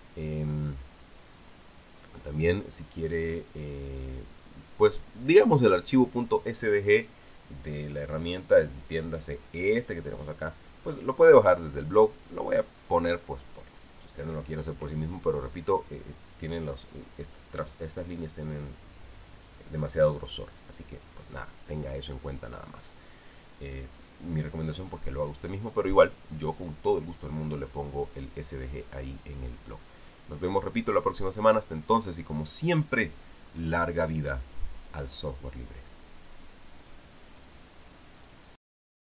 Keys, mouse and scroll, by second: 9.4 click, 11.3 click, 37.7 click, 39.0 click.